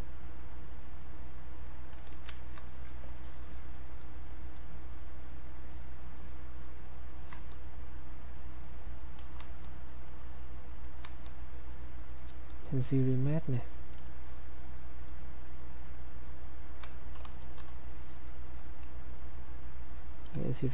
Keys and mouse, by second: 1.1 ctrl+click, 2.3 ctrl+alt+right click, 3.1-8.1 ctrl+drag, 8.1 click, 10.1 click, 12.5 click, 20.3 click.